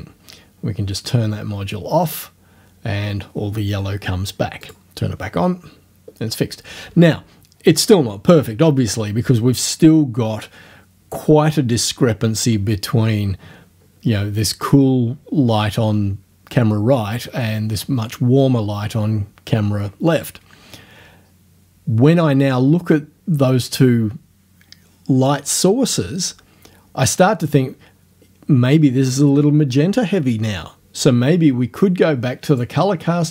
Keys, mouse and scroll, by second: 2.1 click, 4.6 click, 32.5 click.